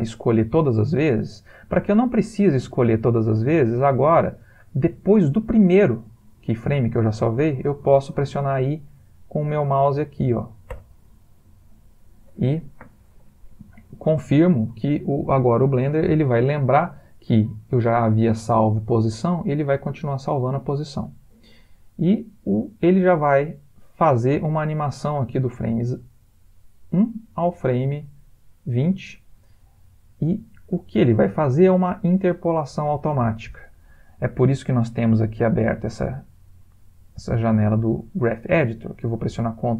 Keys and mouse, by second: 10.7 i, 19.7 click, 35.7 a.